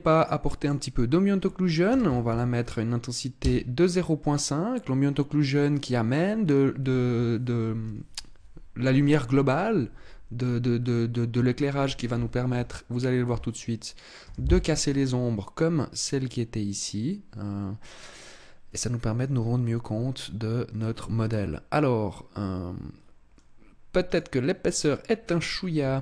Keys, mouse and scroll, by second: 24.7 click, 25.2-25.8 scroll up 6, 25.8 Tab.